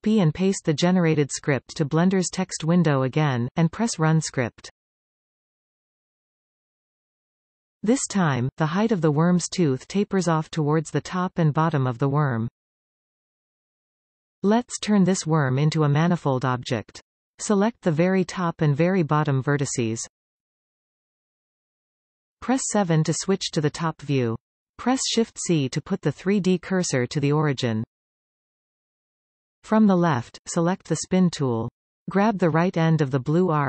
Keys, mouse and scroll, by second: 0.5 ctrl+a, 1.3 ctrl+v, 2.9 v, 3.6 click, 3.9-18.5 middle drag, 6.0-6.4 scroll up 2, 13.3-14.6 scroll up 2, 14.6 scroll up 1, 14.7 Tab, 15.7-16.1 scroll up 2, 17.4 alt+a, 18.4 click, 18.8-19.2 scroll down 1, 19.2-21.2 shift+middle drag, 21.2 shift+click, 22.7 KP_7, 24.0-29.4 shift+middle drag, 24.8 shift+c, 25.4-25.7 scroll up 1, 26.6-26.9 scroll up 1, 29.4 click, 32.0 click.